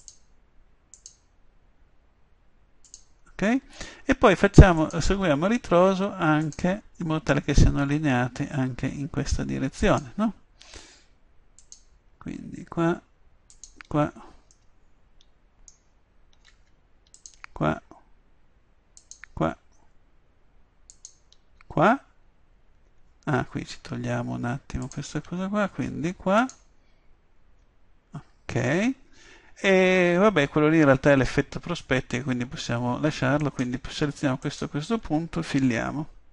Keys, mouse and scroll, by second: 14.7 middle click, 17.1-22.9 drag, 22.9 middle click, 24.8-28.3 drag, 33.4-36.3 drag, 35.6 f.